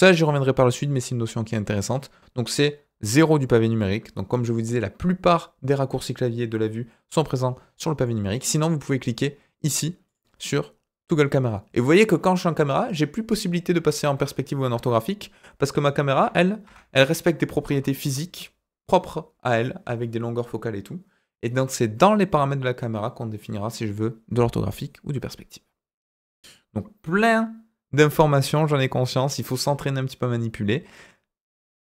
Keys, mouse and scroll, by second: 2.9 KP_0, 8.0 middle drag, 10.0 click, 14.1 KP_8, 14.7 KP_8, 16.1 KP_5, 16.6 KP_5, 17.6 KP_0.